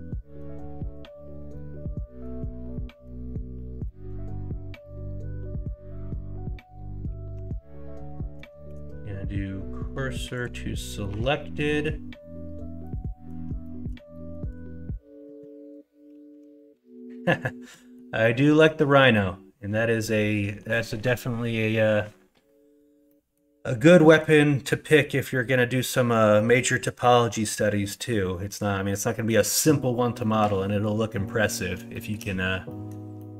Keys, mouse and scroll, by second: 1.5-2.2 middle drag, 2.7 middle click, 3.8 middle drag, 7.3 Tab, 8.0 middle drag, 8.6 shift+s, 10.8 middle click, 11.1 Tab, 11.5 middle click, 12.8 middle click, 13.6 middle drag, 14.1 shift+middle drag, 17.6 middle drag, 18.3 middle drag, 23.1 middle click, 24.0 middle click, 24.9 middle click, 27.0-27.3 middle drag, 27.8 middle drag, 29.2 middle drag, 30.1 middle drag, 31.2 middle drag, 31.9 shift+middle drag, 32.6-33.3 middle drag.